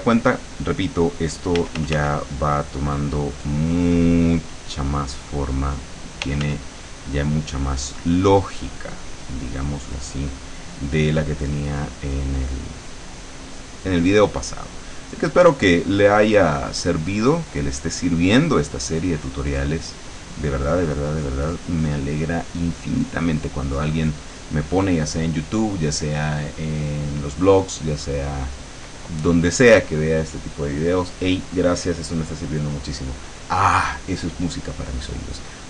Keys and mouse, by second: 1.6 f, 2.4-6.2 drag, 6.4 f, 6.6-10.7 drag, 14.8-17.5 drag, 19.1-24.8 drag.